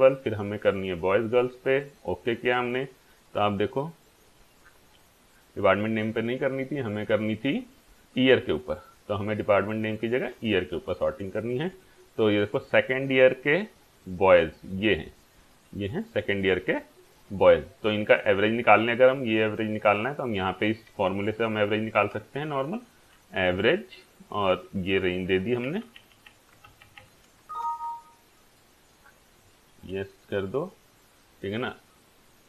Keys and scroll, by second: 21.3-22.6 typing, 23.4 Down, 23.5 Tab, 24.3 shift+9, 24.8 Left, 25.7 Down, 26.7 shift+Down, 27.5 Return.